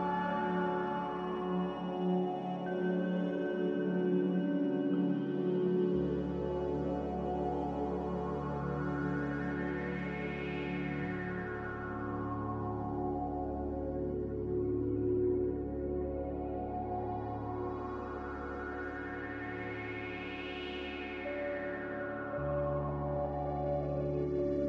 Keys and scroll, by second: 9.0 z, 14.3-15.1 typing.